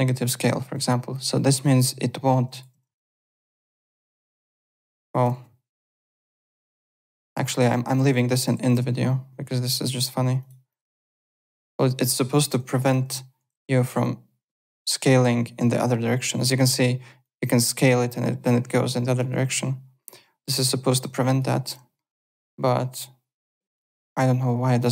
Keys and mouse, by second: 0.4 alt+middle click, 1.1 click, 2.8 ctrl+z, 3.3 click, 4.0 click, 5.3 ctrl+z, 5.7 click, 6.4 click, 8.5 w, 9.7 click, 10.4 click, 10.7-13.4 typing, 11.6 click, 12.4 click, 12.8 click, 14.6 click, 16.6 ctrl+z, 17.2 click, 19.4 ctrl+z, 20.0 click, 20.6 click, 21.2 alt+click, 21.9 middle click, 22.6 click, 23.8 ctrl+z, 24.8 click.